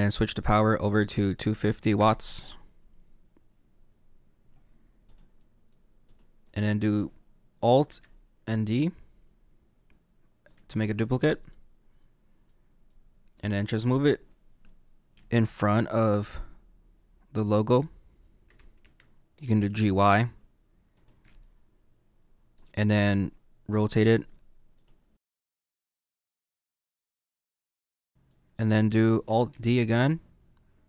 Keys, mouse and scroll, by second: 2.3 click, 5.1 click, 5.3 middle click, 6.1 click, 8.4 alt+d, 11.4 middle click, 12.8 middle click, 13.8-15.1 scroll down 4, 15.1 g, 19.4 g, 20.9 y, 20.9 y, 21.3 middle click, 25.3 click, 25.5 click, 25.6 click, 25.7 ctrl+z, 25.8 click, 26.1 click, 26.3 middle click, 26.5 click, 26.7 click, 26.9 middle click, 27.6 click, 27.7 click, 27.8 ctrl+z, 27.8 click, 28.0 middle click, 29.4-30.8 alt+d.